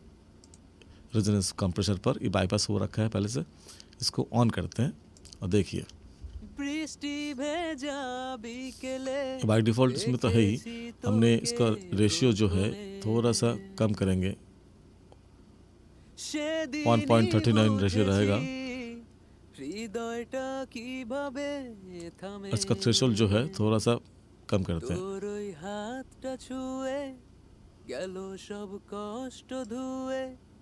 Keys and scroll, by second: 6.1 space.